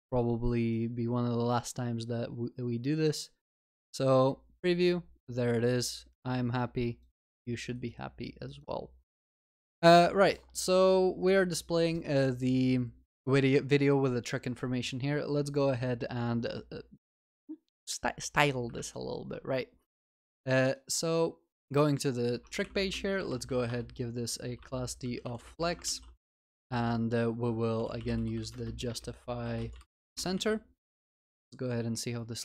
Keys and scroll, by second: 23.7 Return, 25.9 ctrl+s, 30.9 ctrl+s.